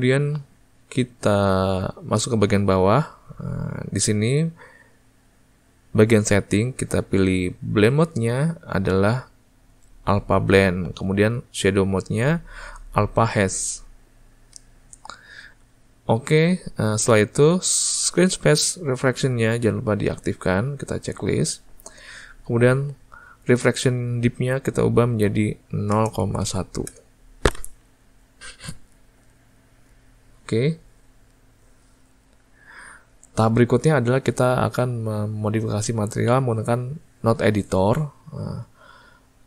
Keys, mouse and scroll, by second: 27.1-39.4 drag.